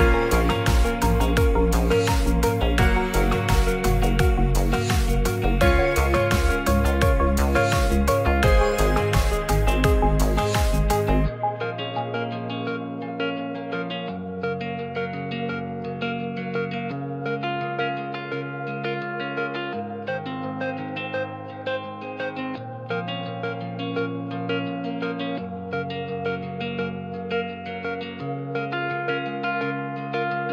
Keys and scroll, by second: 0.7 ctrl+c, 2.6 t, 5.3 ctrl+v, 17.3 9, 20.1 Return, 25.6 t, 27.6 Right, 28.0 Return.